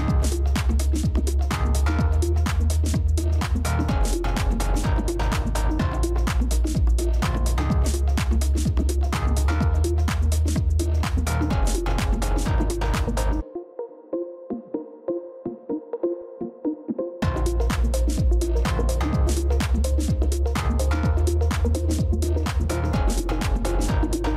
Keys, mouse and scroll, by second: 5.2-9.1 scroll up 1, 9.1-9.7 scroll down 1, 9.9-13.8 scroll down 1, 19.7 shift+click, 24.2 shift+click.